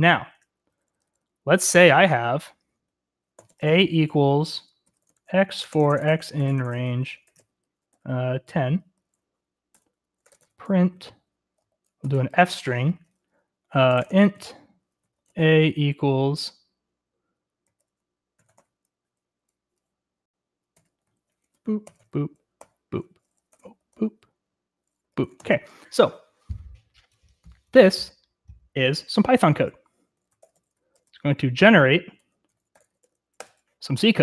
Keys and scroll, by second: 0.3 Escape, 0.4-15.7 typing, 17.7-18.6 typing, 20.6-25.1 typing, 25.4 Escape, 27.3-28.0 typing, 29.9-33.4 typing.